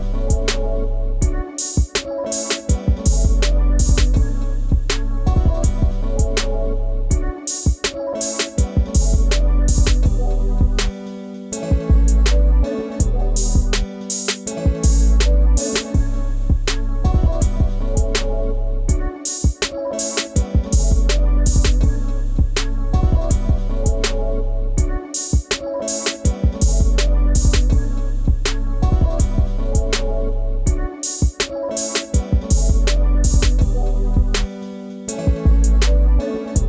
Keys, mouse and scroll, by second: 6.2 scroll down 1, 6.9 ctrl+space, 7.0 ctrl+click, 7.3 ctrl+space, 13.0-13.4 scroll up 1, 13.4 space, 13.4 ctrl+click, 14.6-15.0 ctrl+scroll down 2, 15.2-16.4 scroll up 1, 16.9 scroll down 1, 20.3 ctrl+space, 20.4 ctrl+click, 20.6 ctrl+space, 20.9 scroll down 1, 21.6 space, 21.8 ctrl+click, 23.0 ctrl+scroll down 1, 23.2 right click, 26.3 shift+click, 30.6 space, 30.7 ctrl+click.